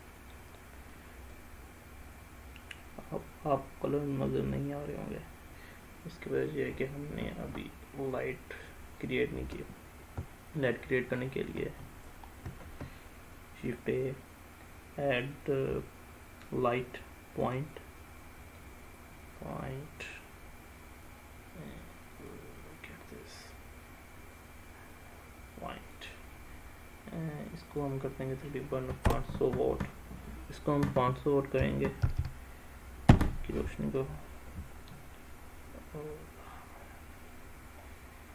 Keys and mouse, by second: 1.3-3.0 middle drag, 12.5 shift+a, 19.0-20.1 drag, 21.0-22.3 drag, 22.7 middle click, 24.9-26.0 drag, 27.8-34.5 drag, 32.2 0, 35.6-37.3 middle drag, 38.2-38.3 middle drag.